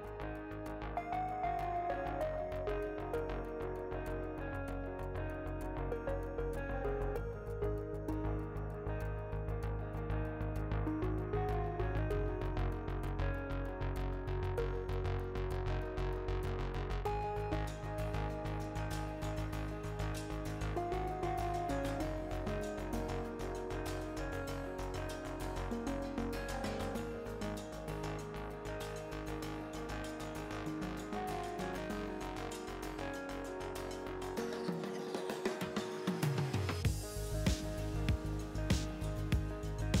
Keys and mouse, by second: 0.3 right click, 0.6-2.1 drag, 2.1 a, 2.2 a, 3.1 e, 5.3 a, 6.1 ctrl+n, 8.9 ctrl+r, 9.0 click, 10.0 ctrl+r, 11.8 ctrl+r, 13.2 ctrl+r, 14.4 ctrl+r, 17.1 ctrl+r, 19.2 ctrl+r, 21.9 click, 23.9 KP_3, 24.8 click, 25.8 ctrl+z, 26.3 a, 27.2 click, 28.0 KP_3, 28.2 KP_1, 35.1-36.3 drag, 37.4-38.7 drag, 39.5-40.0 drag.